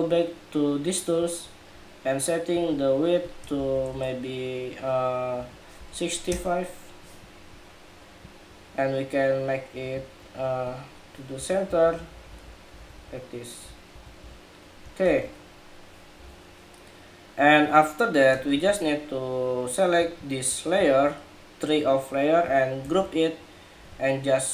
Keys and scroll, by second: 14.8 super+-, 22.5 super+g, 24.3 super+j.